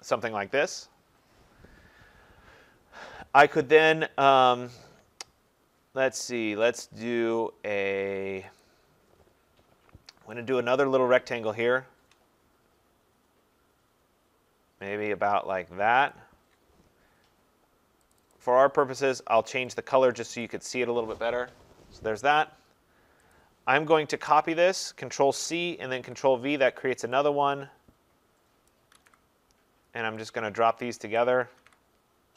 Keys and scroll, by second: 25.3 ctrl+c, 26.0 ctrl+v.